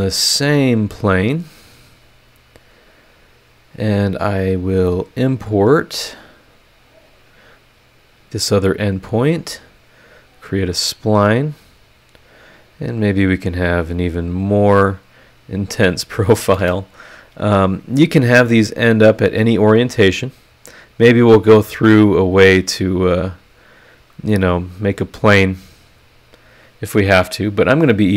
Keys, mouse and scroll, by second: 0.7 click, 1.7 click, 2.8 scroll up 1, 4.5 click, 6.8 click, 7.7 scroll up 2, 10.1 click, 12.1 click, 12.6 click, 13.1 click, 14.2 click, 14.6 click, 15.8 click, 16.4 Escape, 16.9 scroll up 2, 26.0 click, 26.6 click.